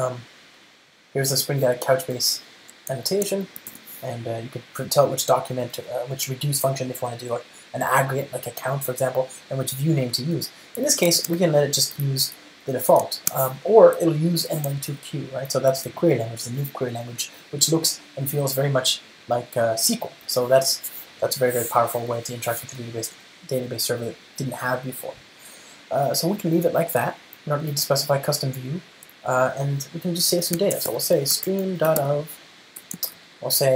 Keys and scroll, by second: 2.5 Return, 4.0 ctrl+space, 10.4 Return, 13.3 ctrl+alt+shift+Right, 15.9 super+BackSpace, 33.2 Return.